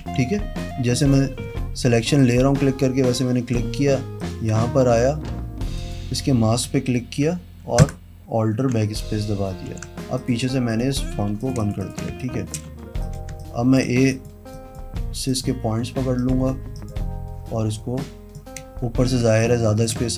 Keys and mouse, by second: 0.2 ctrl+d, 0.8 click, 4.3 click, 6.0 click, 8.0 alt+BackSpace, 9.9 ctrl+d, 10.4 click, 10.9 click, 11.4 z, 11.6 click, 11.8 click, 12.0 click, 12.3 space, 12.4 click, 12.9 a, 13.2 click, 13.5 space, 13.6 click, 14.8 click, 15.5 click, 16.4 click, 16.9 click, 18.2 click, 19.4 space.